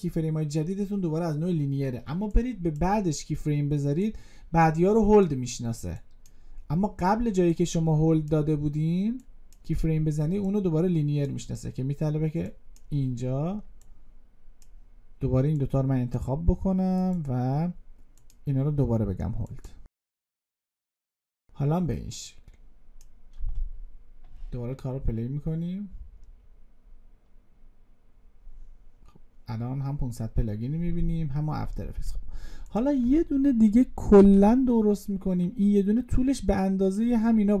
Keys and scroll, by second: 34.0 ctrl+d.